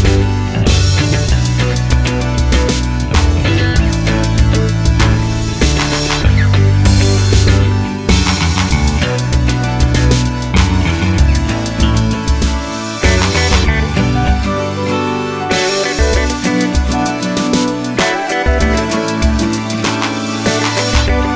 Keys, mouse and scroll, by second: 0.8 Return, 1.7 s, 1.7-3.3 drag, 3.3 alt+e, 5.3 middle click, 6.2 Escape, 6.2 KP_1, 6.6 z, 6.9 scroll up 2, 7.1 s, 7.7 click, 8.4-10.6 drag, 10.7 middle click, 11.0-11.4 scroll up 2, 11.4 middle click, 11.9-19.4 middle drag, 16.0 scroll, 19.4 Tab, 20.1 Tab, 20.6 ctrl+KP_Add.